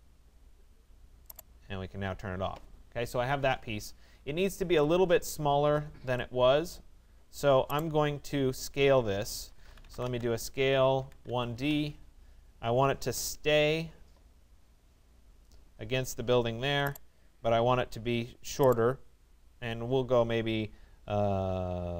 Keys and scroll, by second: 10.6 1, 11.3 d, 11.6 Return.